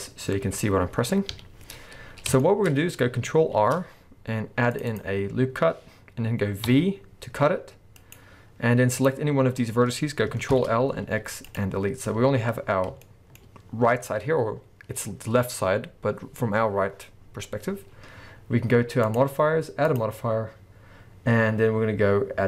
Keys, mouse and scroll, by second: 1.8-2.4 scroll up 1, 2.4 shift+middle click, 2.7-3.6 scroll up 1, 3.6 ctrl+r, 5.0 click, 8.2 right click, 9.0 click, 10.5 ctrl+l, 12.3-13.0 scroll up 2, 13.0-17.0 shift+middle drag, 17.5-19.0 scroll down 2, 19.0 click.